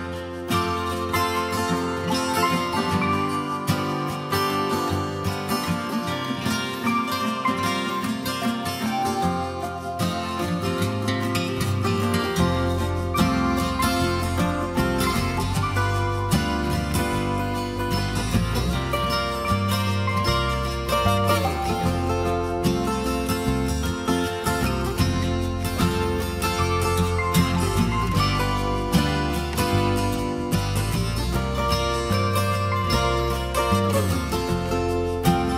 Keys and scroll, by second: 21.5 ctrl+t, 28.0 Return, 29.6 ctrl+s.